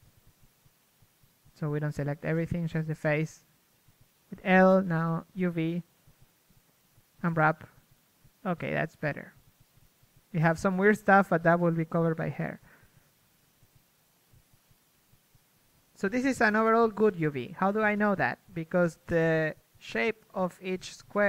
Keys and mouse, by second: 0.4 a, 0.4 l, 0.8 z, 2.3 a, 2.3 z, 2.6 ctrl+Tab, 3.6 l, 4.1 z, 5.9 z, 6.7 u, 8.6 Tab, 9.8 KP_1, 10.3 Tab, 10.5 Tab, 14.8 middle click, 15.3 middle click, 16.1-18.7 typing, 16.5 Tab, 20.9-21.2 typing.